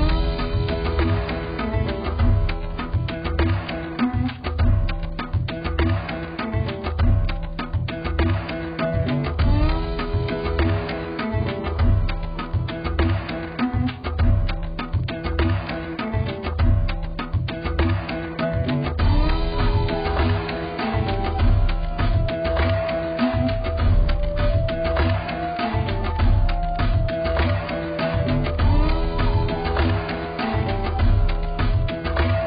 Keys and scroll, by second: 8.0-8.8 ], 29.6 x.